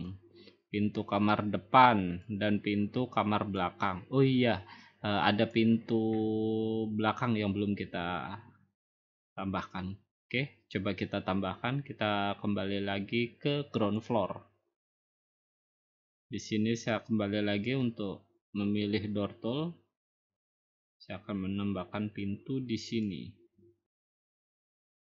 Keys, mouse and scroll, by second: 0.1 click, 0.5 middle click, 0.6 middle click, 0.7-1.2 middle click, 1.0 middle click, 1.0 middle click, 3.5 click, 5.5 click, 14.0 click, 14.9 middle click, 14.9 middle click, 15.1 middle click, 15.4 middle click, 15.5 middle click, 16.1 middle click, 17.8 click, 23.0 click, 24.1 click, 24.7 click.